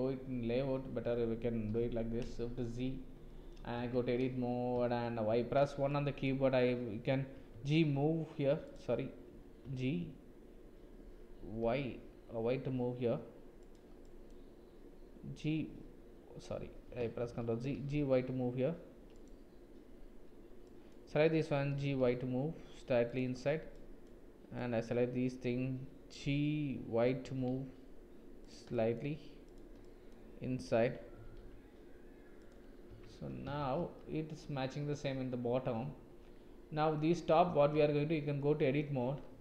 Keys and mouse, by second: 1.7 KP_7, 2.5 shift+z, 3.3 shift+click, 3.8 Tab, 5.1 1, 5.9 click, 7.3 g, 9.6 g, 14.0 click, 15.7 h, 17.2 ctrl+z, 17.7 g, 20.7 click, 21.7 g, 23.8 click, 24.6 click, 27.2 g, 28.8 click, 29.5 click, 31.2 g, 32.9 Tab, 33.6 shift+z, 34.0 click, 37.3 click, 37.7 Tab, 38.4 click.